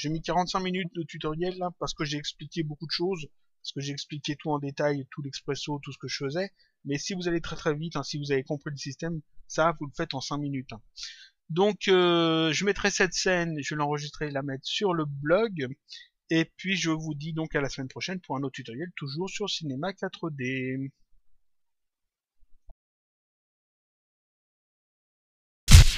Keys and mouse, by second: 6.0 click, 13.5 click, 22.5 click.